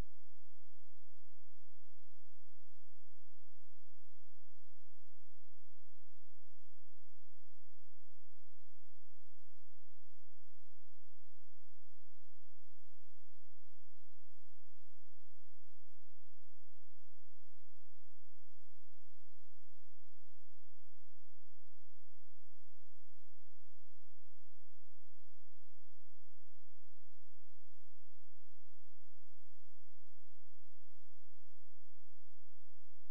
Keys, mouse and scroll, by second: 0.2-1.3 scroll up 1, 1.6 ctrl+z, 3.0 click, 16.5 scroll down 1, 16.8-18.0 scroll up 1, 18.0 scroll down 1, 18.3 scroll up 1, 23.2 scroll up 1, 24.0 click, 28.2 scroll down 1, 28.8-29.6 scroll up 1, 29.6 click.